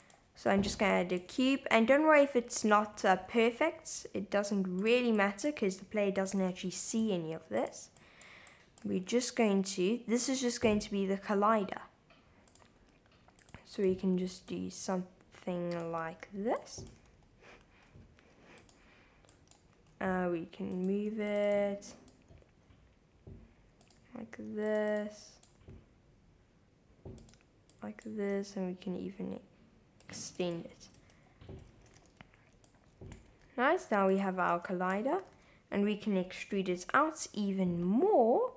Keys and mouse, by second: 0.0 click, 0.6 click, 1.3 g, 1.4 x, 2.6 click, 3.4 g, 3.5 x, 4.8 click, 5.3 click, 5.7 g, 5.9 z, 6.2 click, 6.4 super+z, 6.7 super+r, 7.6 click, 8.2 click, 8.7 click, 8.9 g, 10.4 click, 11.0 g, 12.5 click, 13.1 super+r, 13.7 click, 14.4 click, 14.7 g, 15.8 click, 15.9-17.9 typing, 16.7 click, 18.6 click, 19.3 click, 19.6 g, 19.6 x, 20.8 click, 21.0 super+r, 21.5 click, 22.0 click, 22.3 g, 23.8 click, 24.3 super+r, 24.9 click, 25.2 click, 25.6 g, 27.2 click, 27.8 click, 28.2 g, 30.0 click, 30.4 Tab, 30.9 Tab, 31.7 Tab, 32.0 shift+z, 32.6-33.1 drag, 33.3 shift+z, 34.1 click, 34.5 Tab, 34.9 a, 35.3 s, 35.4 x, 36.7 y.